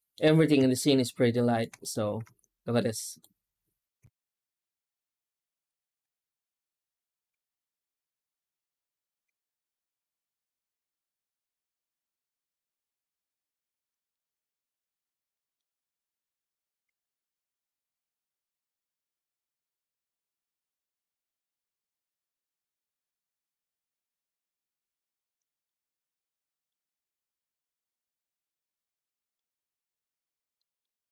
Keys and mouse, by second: 0.6 shift+middle click, 1.7 right click, 2.1 z, 4.3 shift+q, 14.0 middle click, 15.2 middle click, 15.9 F9, 25.5-26.5 middle drag, 27.4-28.8 drag, 29.2 middle drag, 30.5 middle drag.